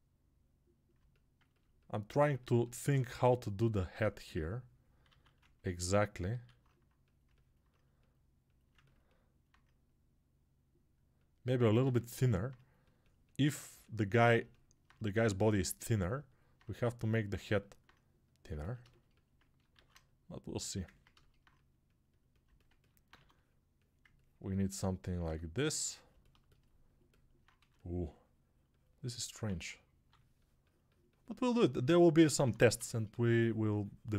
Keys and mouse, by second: 23.9 ctrl+1.